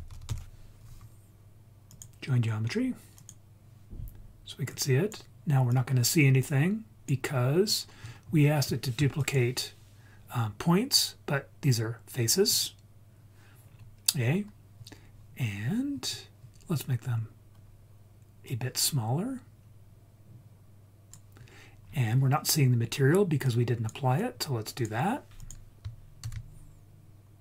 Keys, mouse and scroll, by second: 4.7 click, 5.7-7.1 drag, 7.8-8.6 scroll up 4, 9.2-12.6 drag, 13.6-16.8 scroll down 3, 18.4-21.2 drag, 21.5-22.5 scroll down 3, 22.5-23.4 scroll down 3, 23.4 click, 24.1-24.9 drag, 25.3 click, 26.2 shift+d.